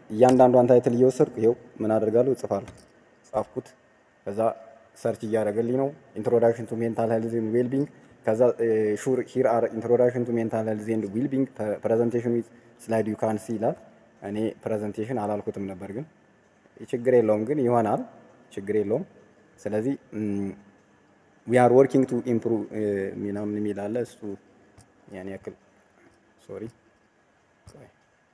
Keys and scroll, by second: 0.2 ctrl+v.